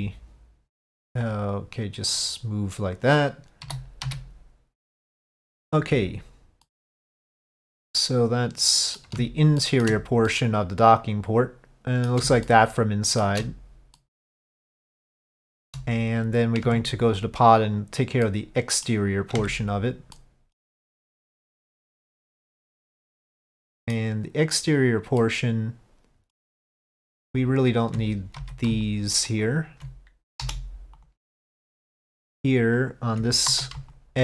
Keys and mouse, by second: 2.2-3.4 drag, 6.8-9.1 middle drag, 9.7 shift+middle click, 10.4-12.2 middle drag, 12.5 shift+middle click, 14.1-15.3 middle drag, 15.5 shift+middle click, 16.7 Tab, 17.7 click, 18.3 middle click, 20.2 middle click, 21.0 middle click, 22.1-24.0 middle drag, 25.3-26.4 middle drag, 27.4 alt+click, 28.8 alt+click, 29.4 alt+click, 30.5 Delete, 32.2 alt+click, 32.9 alt+click, 33.6 2, 34.0 click.